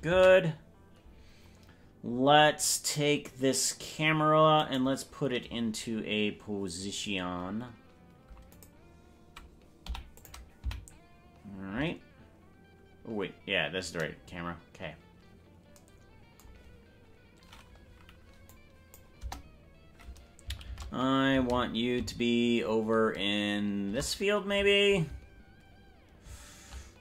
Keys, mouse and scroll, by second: 3.5 ctrl+s, 4.7 right click, 8.5 click, 9.9 i, 10.7 Right, 16.7-17.1 scroll down 6, 18.5 click, 19.1 KP_0, 20.7 shift+`.